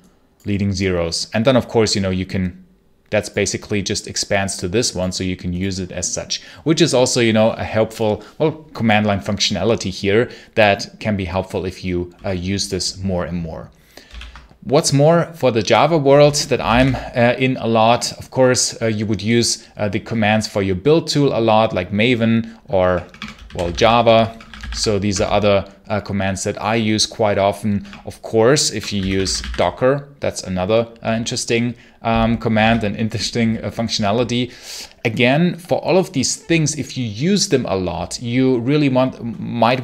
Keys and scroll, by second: 13.9 ctrl+l, 16.2-17.1 typing, 22.7-25.0 typing, 27.7-29.8 typing, 32.5 ctrl+c.